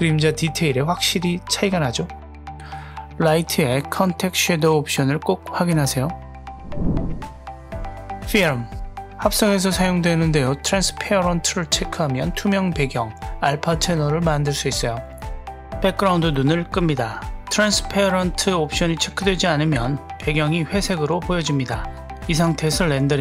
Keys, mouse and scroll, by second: 0.5 click, 1.4 click, 3.0 click, 7.7 click, 8.4 click, 9.0-10.0 scroll down 1, 11.6 click, 14.6 click, 15.2-15.5 scroll down 1, 15.5 click, 20.2-20.7 scroll up 1, 21.6-23.2 drag.